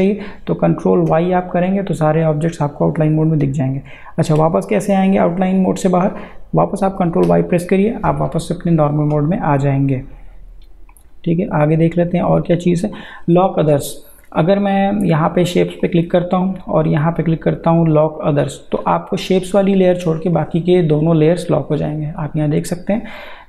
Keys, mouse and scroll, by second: 0.7 click, 1.1 ctrl+y, 7.0 ctrl+y, 10.9 click, 14.4 click, 20.3 click, 23.0 click.